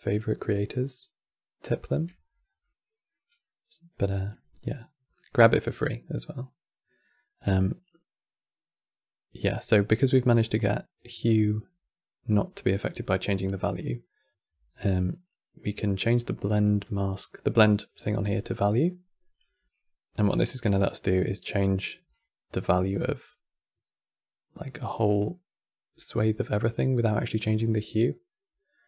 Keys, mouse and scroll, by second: 1.8 middle click, 2.1 scroll up 6, 2.8-6.8 middle drag, 6.8-12.7 drag, 15.6-26.4 drag.